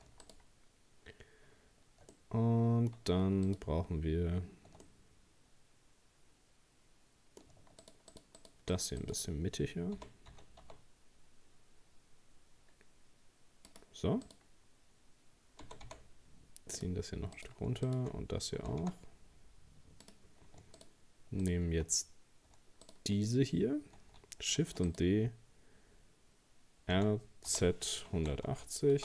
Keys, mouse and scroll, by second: 0.2 shift+right click, 2.1-3.5 middle drag, 3.5 shift+right click, 4.8-7.8 middle drag, 7.8 shift+right click, 8.1 shift+right click, 8.4 shift+right click, 8.7 shift+right click, 9.0 shift+right click, 10.0 g, 14.3 right click, 15.6 g, 17.4 right click, 17.9 shift+right click, 18.6 g, 20.8 shift+right click, 21.4 shift+right click, 22.9 shift+right click, 24.6 shift+d, 26.9 r.